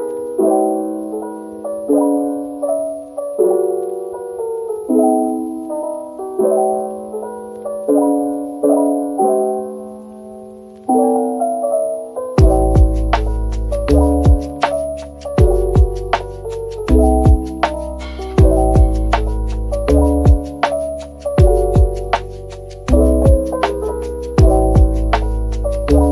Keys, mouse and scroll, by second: 3.0 shift+click, 7.1 l, 7.9 double click, 8.5-9.9 typing, 10.0 Return, 12.9 Tab, 13.1 Return, 13.1 Tab, 13.8 shift+click, 24.6 Tab, 24.8 Tab, 26.0 Tab.